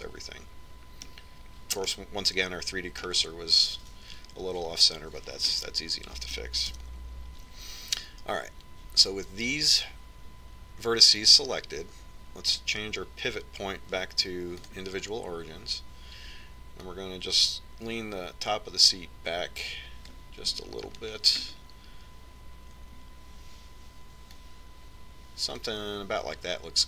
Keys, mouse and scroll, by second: 0.4-2.3 middle drag, 3.6-5.4 middle drag, 7.2-8.5 middle drag, 8.5 KP_1, 14.3-16.0 drag, 16.0 click, 18.7-20.4 drag, 22.8-25.0 middle drag, 26.2-26.8 drag.